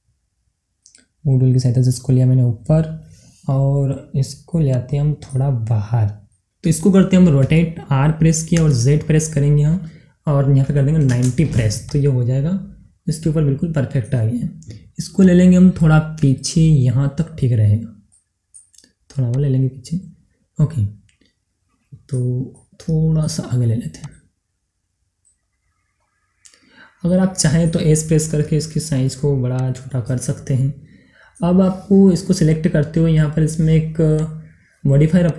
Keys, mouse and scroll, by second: 1.3-1.8 scroll down 1, 1.8 scroll up 1, 2.4 scroll down 1, 2.9-4.6 middle drag, 4.6-7.0 drag, 7.0-8.4 middle drag, 8.4 r, 8.4 z, 11.8 click, 12.7 scroll down 2, 13.0-15.1 middle drag, 15.1-16.8 drag, 16.9 scroll up 1, 17.8 scroll down 1, 18.0 middle click, 19.3 click, 20.2-24.0 middle drag, 24.0-26.0 drag, 26.0 scroll up 1, 26.7 scroll, 26.8 scroll down 1, 26.9 middle click, 28.2 s, 29.5 click, 29.8 scroll down 1, 30.1-33.5 middle drag, 34.1 middle click, 34.1 click.